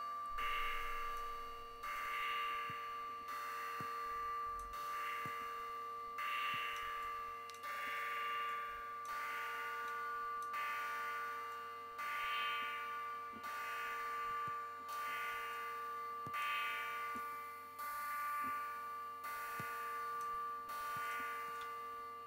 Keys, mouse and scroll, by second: 1.7-4.5 drag, 5.0-6.7 drag, 6.8 click, 8.2 click, 9.6 click, 11.3-14.9 drag, 15.3 click, 16.9-20.2 drag, 20.8-21.5 drag, 21.5 space, 22.0 ctrl+scroll down 2.